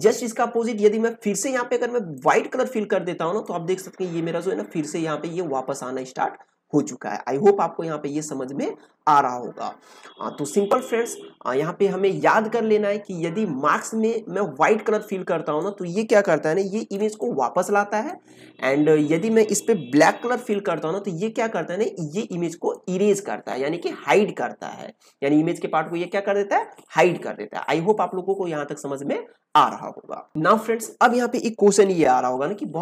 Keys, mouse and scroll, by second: 2.1-13.7 drag, 13.7-16.6 drag, 16.6 alt+right click, 17.1-19.9 drag, 19.9-20.8 typing, 20.4-31.5 drag, 31.5 ctrl+p, 31.8 ctrl+z.